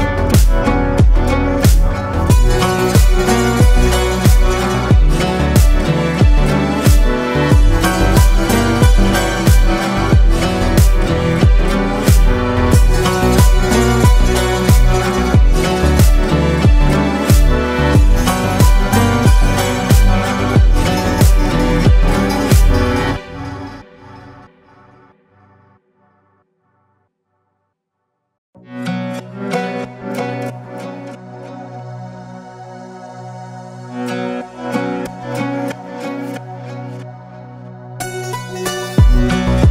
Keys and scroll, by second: 1.9 ctrl+space, 5.0 ctrl+z, 17.0 space, 20.4 ctrl+space, 23.5 ctrl+space, 24.2 ctrl+space, 25.6 space, 26.2 ctrl+space, 26.8 ctrl+space.